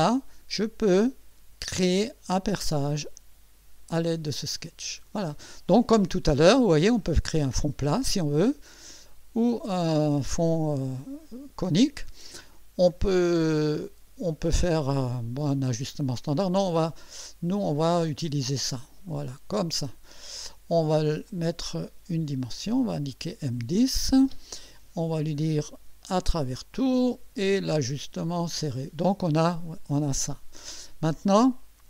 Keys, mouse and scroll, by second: 3.0 click, 4.3 click, 7.2 click, 9.1 click, 16.6 click, 19.1 click, 21.3 click, 22.7 click, 26.0 click, 26.8 click, 27.9 click, 28.6 click.